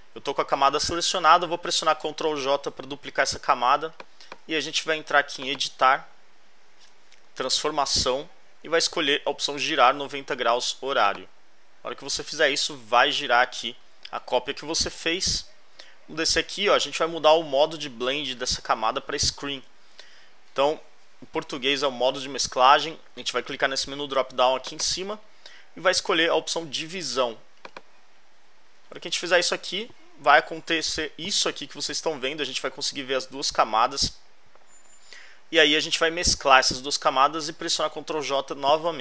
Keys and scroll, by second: 2.2 super+j, 13.7 alt+Left, 31.0 alt+Left, 38.2 alt+Right.